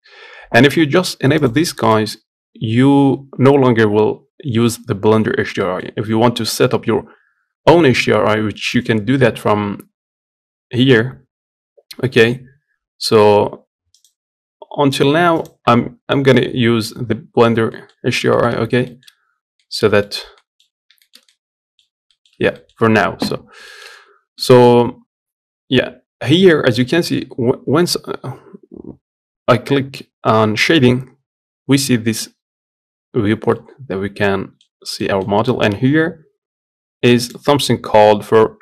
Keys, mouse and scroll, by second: 5.5-14.6 middle drag, 14.6 click, 15.5-15.8 scroll up 1, 15.8 scroll down 1, 16.0-20.5 middle drag, 17.8 scroll up 1, 18.2-18.6 scroll down 1, 20.5 scroll up 1, 20.7-22.1 shift+middle drag, 22.1 scroll down 1, 22.3-34.5 middle drag, 34.5 scroll down 1, 34.7-38.6 middle drag.